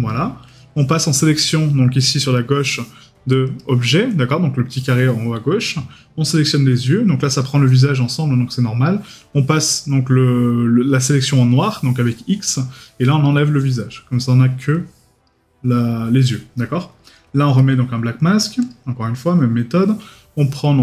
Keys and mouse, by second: 17.6 right click.